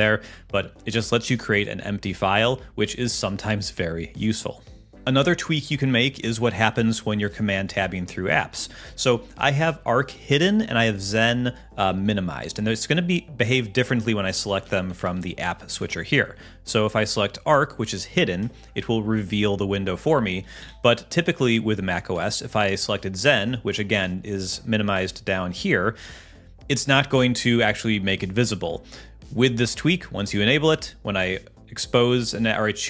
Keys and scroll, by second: 5.1 super+Tab, 5.7 super+Tab, 14.4 super+Tab, 15.5 super+Tab, 20.6 super+h, 21.4 super+Tab.